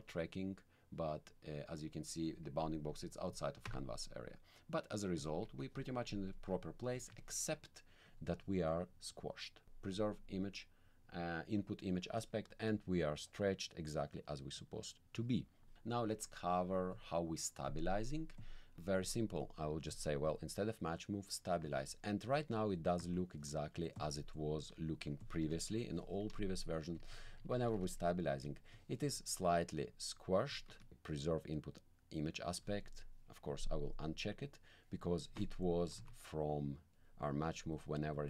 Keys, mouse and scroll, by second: 3.2 click, 3.6 1, 5.2 click, 5.4 1, 6.3 alt+middle click, 7.0 alt+middle click, 8.0-9.6 drag, 9.9 click, 17.8 middle click, 18.4 click, 19.0 click, 19.9 click, 23.0 alt+middle click, 23.7 middle click, 23.8 click, 24.0 middle click, 24.3 click, 25.2 click, 25.4 t, 26.0 ., 26.6 click, 26.8 Down, 29.4-30.4 drag, 30.7 click, 30.7 1, 33.5 click, 36.0 alt+middle click, 36.9 middle click, 37.6-38.2 drag.